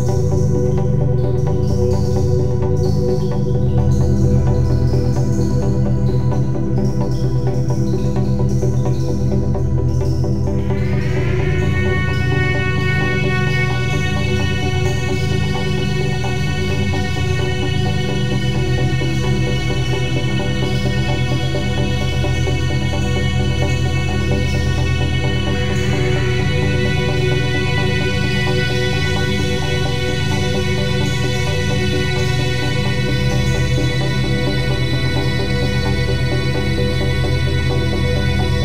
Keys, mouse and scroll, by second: 0.3-9.5 drag, 9.5 ctrl+shift+s, 11.5 click, 16.1 click, 20.8 click, 21.1 ctrl+n, 23.1 click, 24.9 t, 25.3 click, 26.8-31.6 typing, 36.1 r, 38.3 typing.